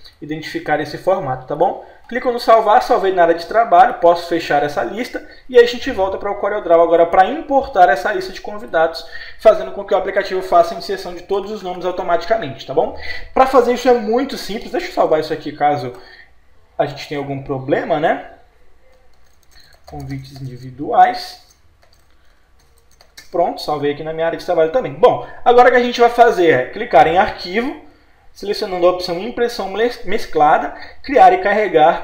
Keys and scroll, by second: 10.9 Down, 22.6 BackSpace.